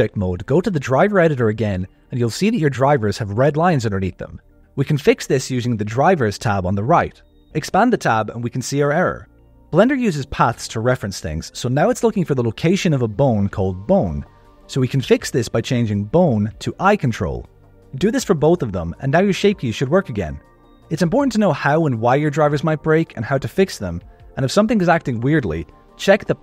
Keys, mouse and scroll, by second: 0.3 click, 5.6 click, 7.0-9.0 drag, 9.4-10.5 scroll down 4, 14.2-16.0 drag, 14.4 BackSpace, 14.5 BackSpace, 17.0 click, 17.5 click, 17.7 click, 18.1 BackSpace, 18.2 BackSpace, 20.7 click, 21.4 click, 21.6 g.